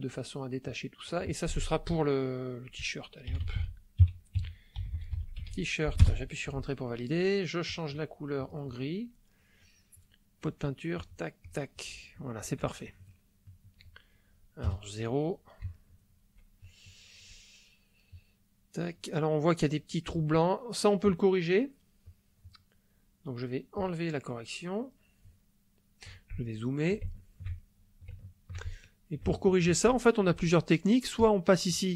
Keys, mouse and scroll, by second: 0.6-1.9 drag, 3.3-5.4 typing, 4.0 KP_Subtract, 6.0 Return, 7.6 click, 8.4 click, 10.9 click, 11.4 click, 12.9 Caps_Lock, 13.1 middle click, 14.6 KP_0, 15.7 shift+middle click, 16.8 shift+middle click, 22.0 click, 23.8 click, 25.3 shift+click, 26.5 ctrl+shift+click, 27.1 ctrl+shift+click, 27.2-28.6 ctrl+shift+middle drag, 28.7 ctrl+shift+click, 28.7-29.8 ctrl+shift+middle drag, 31.1-31.9 drag.